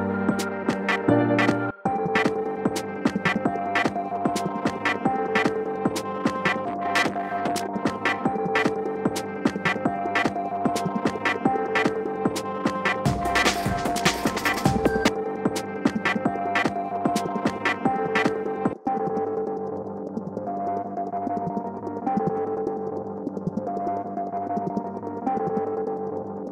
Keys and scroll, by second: 12.4 Right.